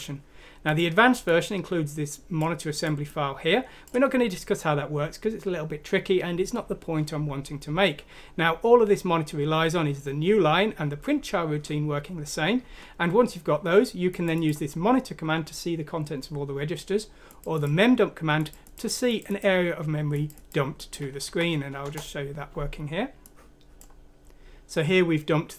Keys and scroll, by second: 21.2 F6, 21.8 Return.